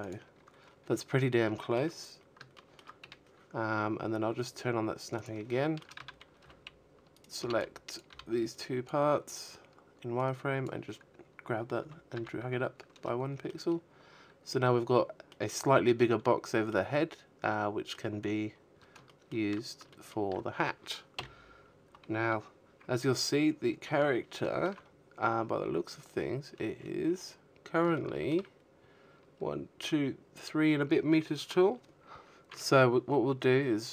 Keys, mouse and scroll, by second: 0.3 a, 2.5 click, 2.9 shift+middle click, 3.3 z, 3.7 b, 4.7 right click, 4.7 b, 5.8 b, 7.5 click, 9.1 a, 9.4 z, 9.9-10.3 scroll down 4, 10.3 middle click, 11.0 middle click, 13.3 middle click, 14.2 middle click, 15.8-16.2 scroll down 4, 16.4 shift+middle click, 17.2 shift+middle click, 18.5 KP_1, 19.4-20.0 scroll up 1, 21.6 shift+middle click, 21.6-22.1 scroll up 3, 22.1-22.9 scroll down 3, 22.9-23.6 scroll down 5, 23.6-24.1 scroll down 7, 24.1-25.1 scroll up 9, 25.1 scroll up 1, 25.2 shift+middle click, 29.8 Tab, 30.5-31.4 scroll up 1, 31.4 scroll up 2, 31.5 shift+middle click, 32.0-32.5 shift+scroll down 1, 33.0 shift+middle click.